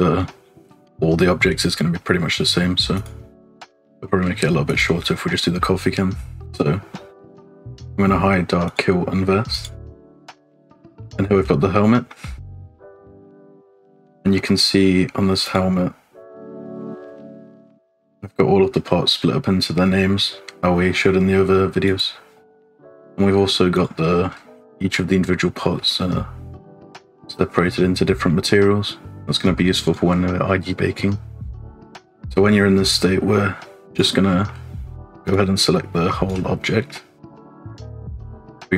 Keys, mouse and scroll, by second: 2.9 click, 4.6 click, 8.7 click, 9.6 click, 10.1 scroll up 2, 10.4 shift+middle click, 10.7-11.2 scroll up 3, 11.2 shift+middle click, 11.5 middle click, 12.1 middle click, 12.4 scroll down 2, 12.7 middle click, 13.7 shift+middle click, 14.1 middle click, 15.4 click, 16.3 click, 17.4 click, 21.8 click, 23.8 click, 24.3-25.0 scroll up 1, 25.0 middle click, 25.8 shift+middle click, 25.9 scroll up 1, 29.4 click, 31.9 scroll down 1, 32.0 middle click, 32.7 middle click, 33.9 click, 34.3 shift+middle click, 35.3-36.5 drag, 36.7 middle click, 38.1-38.7 drag.